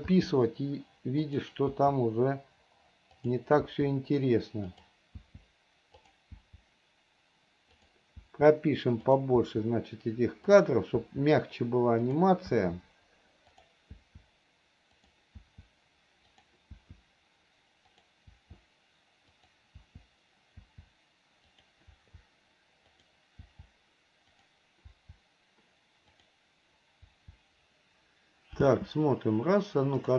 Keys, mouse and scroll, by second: 1.6 click, 3.4 click, 5.0 click, 6.3 click, 8.0 click, 9.3 click, 10.8 click, 12.3 click, 13.8 click, 15.2 click, 16.6 click, 18.2 click, 19.6 click, 21.8 click, 23.2 click, 24.6 click, 26.4 click.